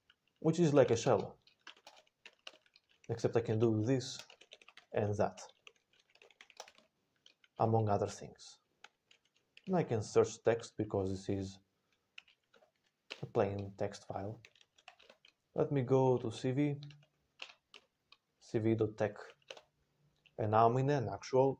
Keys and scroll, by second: 0.4-2.6 typing, 2.9 ctrl+p, 3.1 ctrl+p, 3.4 ctrl+e, 3.7-7.0 typing, 8.8 Return, 8.8 ctrl+s, 9.4-10.1 typing, 11.9-13.2 typing, 14.2-14.9 typing, 16.1 ctrl+s, 16.1-17.1 typing, 17.2 Return, 17.6 Return, 18.4 ctrl+n, 18.5 ctrl+n, 18.9 ctrl+n, 19.3 Return.